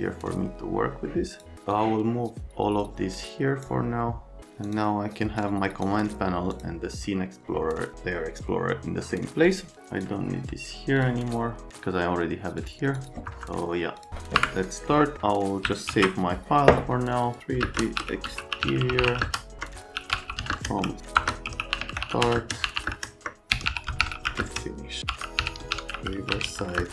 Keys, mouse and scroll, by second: 1.7 click, 4.6 middle click, 5.3 middle click, 6.5 middle click, 9.4 middle click, 9.7 middle click, 11.0 middle click, 11.2 right click, 12.6 click, 12.9 click, 13.3 F3, 14.0 click, 14.3 Delete, 14.6 right click, 15.9 alt+s, 17.6 space, 19.2 space, 20.5 space, 24.4 space, 26.7 space.